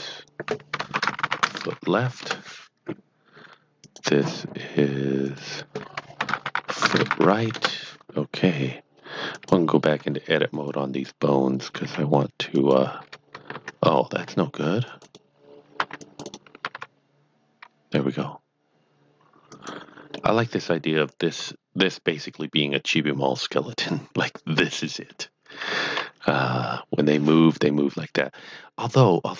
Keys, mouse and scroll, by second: 0.9-2.5 typing, 3.8 click, 5.3 click, 5.9-7.5 typing, 7.5 Return, 9.3 click, 9.9 Tab, 10.5-11.7 drag, 11.4-12.3 typing, 12.6 right click, 14.3-14.6 scroll up 2, 14.8 click, 15.0 right click, 15.8-17.3 typing, 16.0 click, 16.1 right click, 19.2-19.9 typing, 19.6 click, 20.1 middle click, 21.4 KP_Divide, 22.1 middle click, 25.7 KP_Divide, 26.4 KP_1, 28.3 middle click.